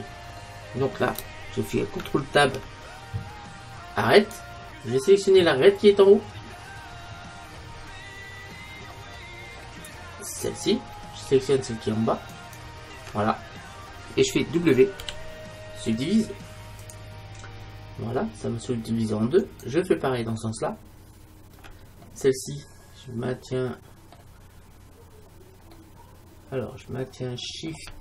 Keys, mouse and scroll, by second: 2.4 ctrl+Tab, 6.9-10.4 middle drag, 10.4-12.3 right drag, 12.4-14.3 right drag, 15.1 w, 19.5-21.3 right drag, 22.3-24.1 middle drag, 25.8-27.7 middle drag.